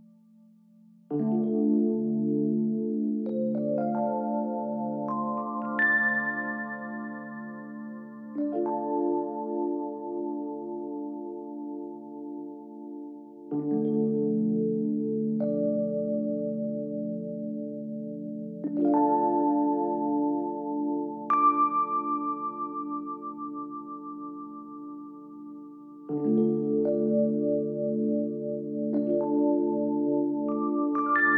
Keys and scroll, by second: 4.8 ctrl+z, 11.3 Escape, 12.2 ctrl+z, 28.1 Escape.